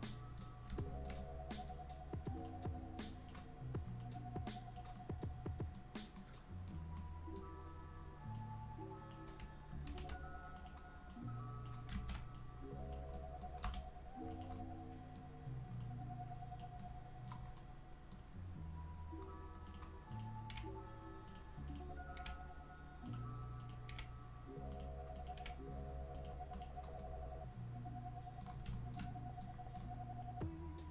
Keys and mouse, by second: 0.8 shift+middle drag, 1.2-1.7 middle drag, 2.5-3.3 drag, 4.0-4.8 drag, 5.0-5.8 middle drag, 6.2-6.7 middle drag, 7.0-7.4 middle drag, 8.3-9.1 drag, 9.9 shift+d, 10.6 click, 11.2-11.7 drag, 12.0 ctrl+z, 12.4-13.0 drag, 13.2 middle drag, 13.7 s, 14.3 click, 14.6-15.2 middle drag, 15.8-16.6 drag, 16.8-17.3 middle drag, 17.6-18.1 middle drag, 19.7 click, 20.2 click, 20.5 g, 22.2 g, 23.1 drag, 23.6 click, 23.9 g, 24.8 drag, 25.8 g, 26.2 click, 27.0-28.4 middle drag, 28.8 shift+middle drag, 29.0-29.5 middle drag, 29.8-30.9 middle drag.